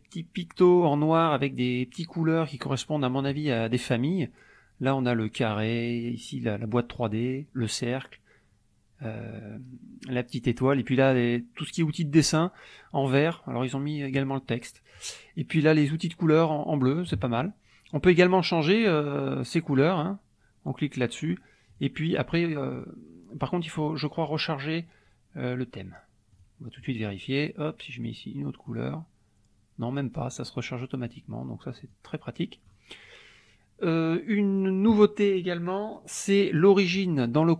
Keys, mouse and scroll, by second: 18.8 click, 19.7 click, 21.8 click, 22.7 click, 26.4 click, 26.8 click, 28.0-29.0 drag, 30.5 click, 31.8 click, 32.7 click, 34.9 click.